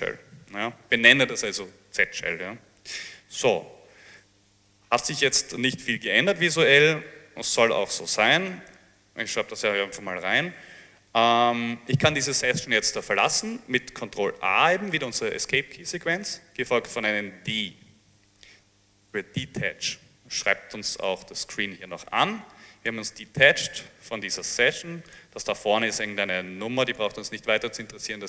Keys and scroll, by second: 0.7 Return, 8.2-9.2 typing, 16.3 a, 17.5 d.